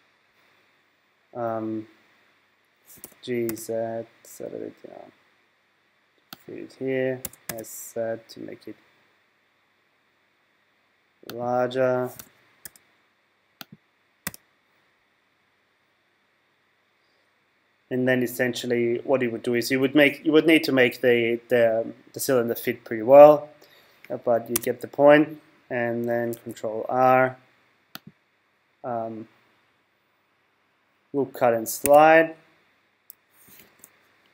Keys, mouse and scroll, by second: 3.0 g, 6.4 click, 7.3 s, 11.4 click, 12.2 g, 13.7 click, 14.2 z, 24.5 Tab, 26.3 ctrl+r, 33.6 ctrl+r.